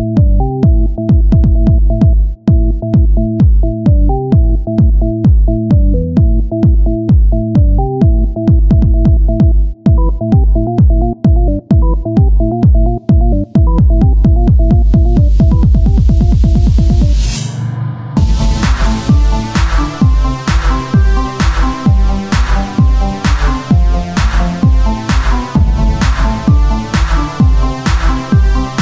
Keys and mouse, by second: 1.1 e, 4.2-10.8 drag, 5.2 e, 8.8 z, 11.2 r, 12.3 e, 13.2 z, 13.7-14.9 drag, 18.9 z, 20.8 r, 21.6 z, 22.1-23.7 drag, 26.1 r.